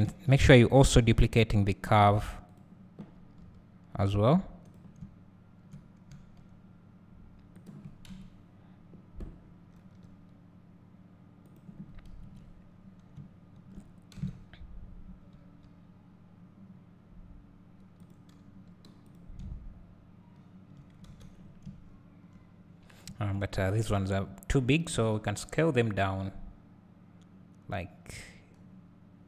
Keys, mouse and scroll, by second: 0.0 s, 3.2 g, 4.8 click, 6.1 s, 7.7 click, 9.8 g, 11.6 click, 15.3 s, 18.1 click, 18.5 g, 19.2 click, 21.1 alt+a, 21.4 scroll down 2, 21.6 `, 22.7 scroll up 1, 23.7 click, 24.9 s.